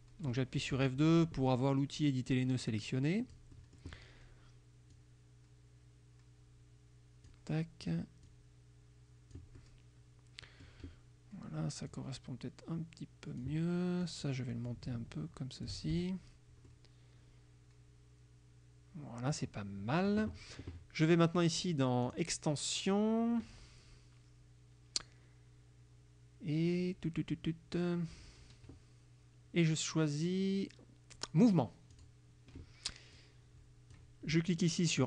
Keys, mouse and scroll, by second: 0.8 F2, 2.9-4.1 drag, 5.0-7.6 drag, 8.3-9.6 drag, 12.0-13.7 drag, 14.1 click, 14.8 ctrl+click, 16.0 ctrl+F1, 16.8-19.6 drag, 22.1 click, 32.0 click, 33.2 click.